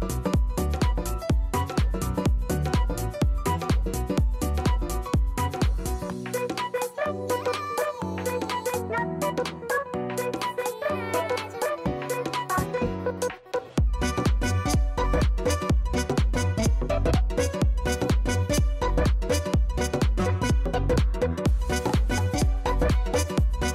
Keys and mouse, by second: 1.1 alt+right click, 1.3 alt+click, 2.1 alt+right click, 3.7 alt+click, 5.5 KP_0, 5.6 Return, 6.2 right click, 6.3 alt+click, 6.9 alt+right click, 7.0 alt+middle click, 7.2 alt+click, 7.4 alt+middle click, 7.6 alt+right click, 8.5 click, 9.2 click, 9.8 KP_8, 10.0 Return, 10.8 right click, 11.0 alt+click, 11.7 click, 16.3 click, 19.8 alt+click, 20.9 click.